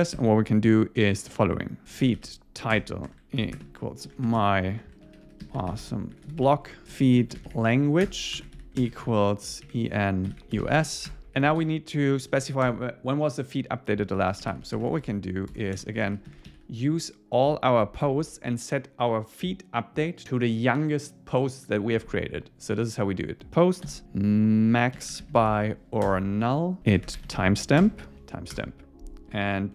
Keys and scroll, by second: 2.7 Return, 8.1 Return, 10.9 Right, 11.1 Return, 23.5 Return, 26.1 Return, 27.9 Return, 28.5 Return.